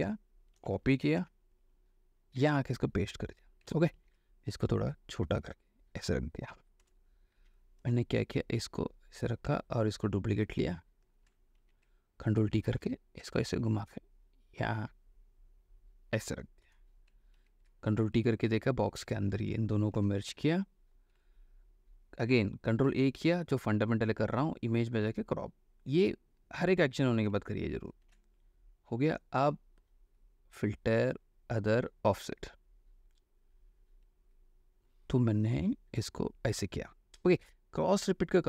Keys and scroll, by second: 0.7 ctrl+c, 1.3 ctrl+w, 2.5 ctrl+v, 4.2 ctrl+t, 7.0 Return, 7.5 v, 11.7 ctrl+alt+t, 16.9 Return, 17.5 ctrl+t, 19.2 Escape, 20.3 ctrl+shift+e, 22.8 ctrl+a, 28.2 ctrl+d.